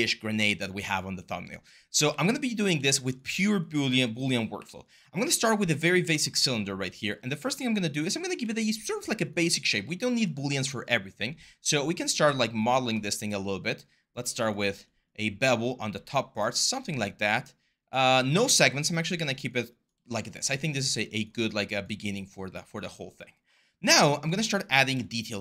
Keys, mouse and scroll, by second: 1.8 r, 4.3 w, 24.4 w.